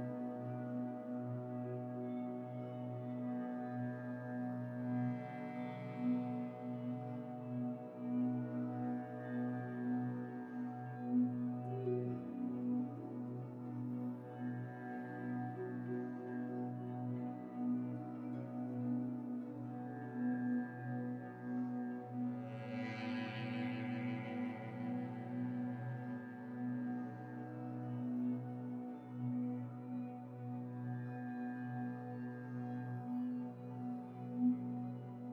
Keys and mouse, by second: 1.7 click, 2.1 g, 5.8 g, 8.2 g, 9.4-10.6 drag, 11.6 click, 11.8 Tab, 14.6 click, 14.8 g, 17.7 click, 18.0 g, 23.1 click, 23.3 g, 26.2 click, 27.3 click, 28.3 g.